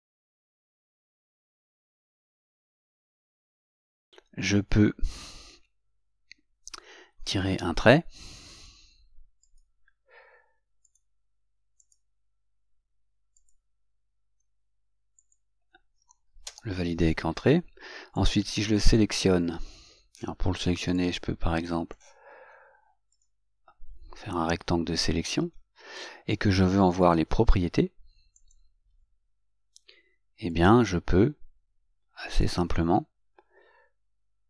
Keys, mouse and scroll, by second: 12.0 click, 13.6 click, 16.7 Return, 28.6 click.